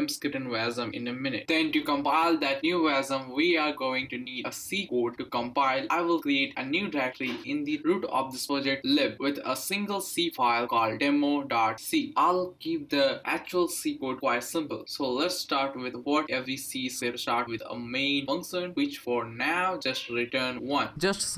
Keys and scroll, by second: 0.0-5.0 typing, 2.2 Return, 3.9 Left, 4.2 Down, 5.7 Down, 6.0 Left, 6.1 Left, 7.1 BackSpace, 7.7 BackSpace, 10.1-12.4 typing, 13.7 Return, 13.9 Return, 14.9-20.5 typing.